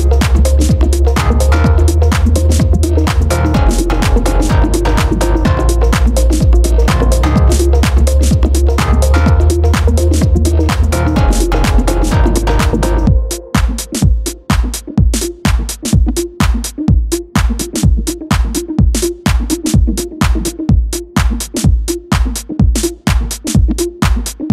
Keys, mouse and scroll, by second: 0.3-4.2 shift+middle drag, 5.4-8.4 middle drag, 8.9-11.7 middle drag, 11.7 click, 14.5 click, 15.7 click, 17.1 click, 17.9-20.6 right drag, 20.6 KP_1, 22.5-24.5 drag.